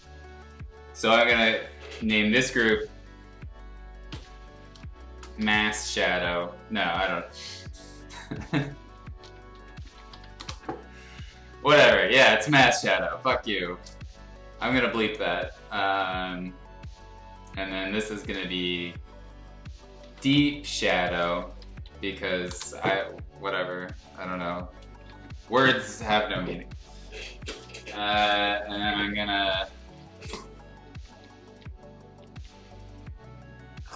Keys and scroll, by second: 4.1 shift+m, 5.1-6.2 typing, 7.5-10.6 typing, 19.7-22.6 typing, 25.0 ctrl+z, 29.7-32.5 typing.